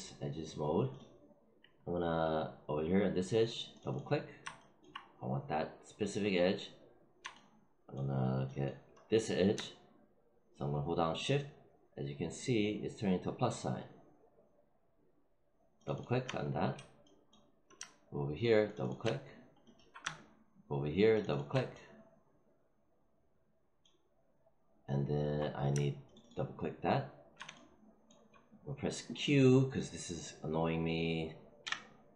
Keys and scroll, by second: 31.5 q.